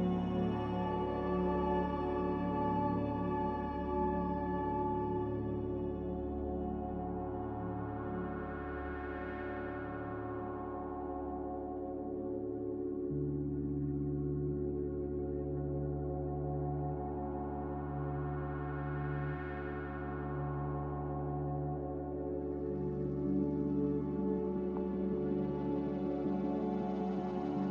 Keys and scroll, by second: 10.6 z, 11.7 a, 13.7 ctrl+c, 15.7 ctrl+v, 16.2 Escape, 17.2 ctrl+j, 24.5 b, 25.8 Delete.